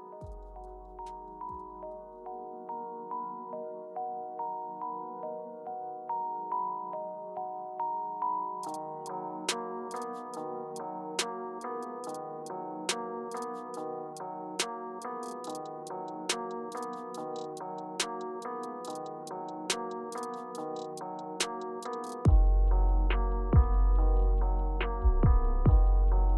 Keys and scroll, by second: 1.4 BackSpace, 2.7 Return, 3.4 Return, 4.2 BackSpace, 5.8 Left, 6.0 Left, 6.4 Right, 7.0 Return, 22.9-23.9 typing.